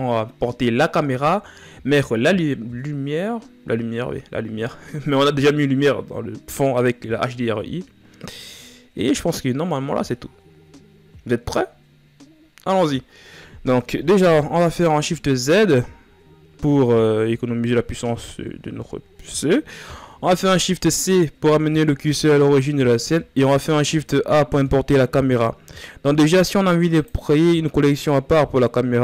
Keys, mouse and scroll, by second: 14.4 shift+z, 17.8-18.4 ctrl+scroll down 2, 19.8 scroll down 1, 21.0 shift+c, 22.0-23.2 scroll down 3, 26.6 click.